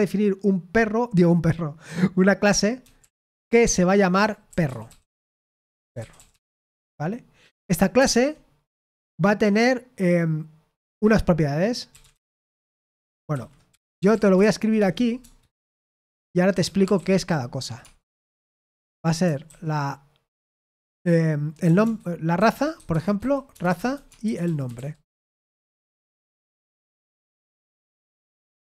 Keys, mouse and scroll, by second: 2.5-7.2 typing, 7.9 Return, 8.8 Tab, 11.6-17.7 typing, 19.1-19.9 typing, 21.6-28.6 typing.